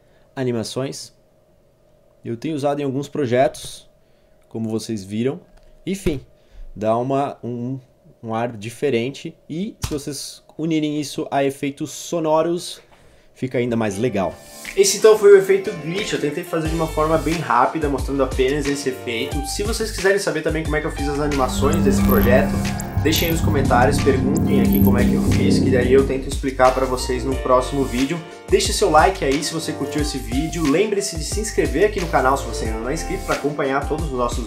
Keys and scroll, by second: 3.5 Page_Down, 5.5 ctrl+v, 6.1 0, 9.8 space.